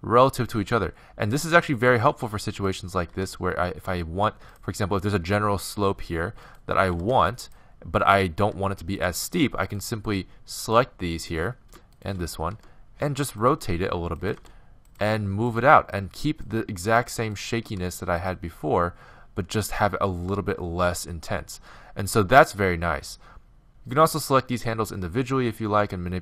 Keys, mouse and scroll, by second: 2.7-4.4 right drag, 3.1 g, 6.5-13.6 right drag, 6.9 g, 8.4 g, 12.6 r, 13.5 g, 14.4 r, 15.0 g, 16.5-19.2 right drag, 16.9 g, 17.9 g, 23.6 g, 24.6-26.2 right drag, 24.8 g.